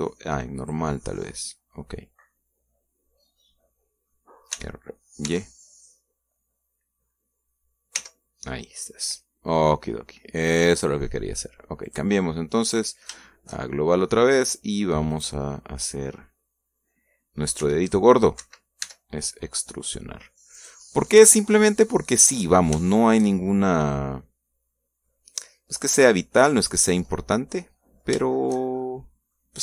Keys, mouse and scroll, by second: 1.4 click, 2.7-5.1 middle drag, 5.4 r, 6.1 y, 8.8 y, 11.6 click, 12.7 click, 13.5 click, 14.4 shift+middle click, 15.1 shift+middle click, 16.0 right click, 16.4 middle click, 18.5 r, 19.3 Escape, 19.7 e, 21.4 click, 21.8-23.7 middle drag, 23.8 shift+middle click, 24.4-26.1 shift+middle drag, 26.3 middle click, 27.3 click, 28.0-29.1 middle drag.